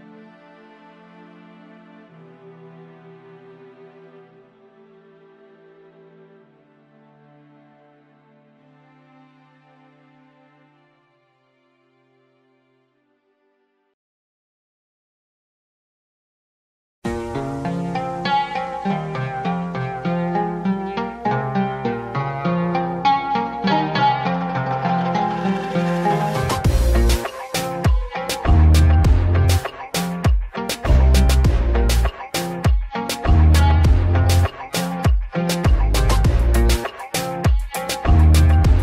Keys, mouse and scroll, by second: 8.3 click, 9.2 shift+a, 13.6 scroll down 3, 13.8-14.2 scroll up 1, 14.2 click, 14.8 drag, 15.1-15.8 middle drag, 15.8-16.6 scroll down 5, 16.6-17.2 middle drag, 17.2-18.0 scroll up 1, 18.0 click, 19.3 click, 20.5 click, 21.9-23.9 drag, 24.8 0, 27.9-28.9 drag, 28.9 ctrl+z, 31.6-34.6 drag, 34.6 s, 37.6 click.